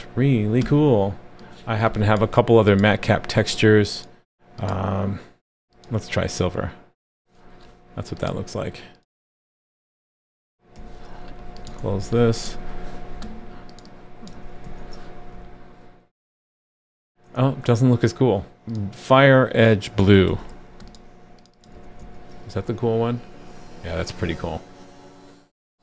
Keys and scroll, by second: 10.8 super+c, 11.8 super+w, 14.3 super+v, 14.6 super+s, 20.3 super+c, 21.7 super+v, 22.0 super+s.